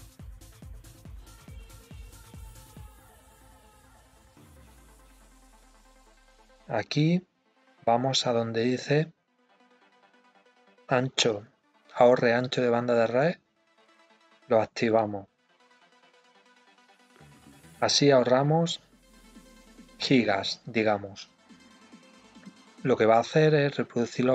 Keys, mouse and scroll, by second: 18.4-21.4 drag, 21.5-22.7 drag, 22.8 click, 23.3-24.3 drag.